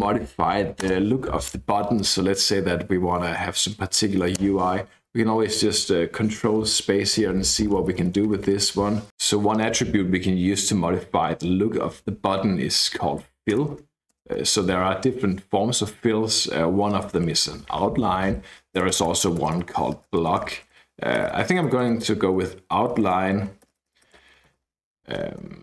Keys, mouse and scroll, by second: 0.8 space, 4.4 ctrl+space, 7.1 Down, 7.3 Down, 7.5 Down, 7.7 Down, 7.9 Down, 8.2 Down, 8.4 Down, 9.2 space, 12.7 f, 13.2 l, 13.5 Return, 14.1 ctrl+space, 14.8 Escape, 16.6-25.0 typing, 25.1 Left, 25.4 Up.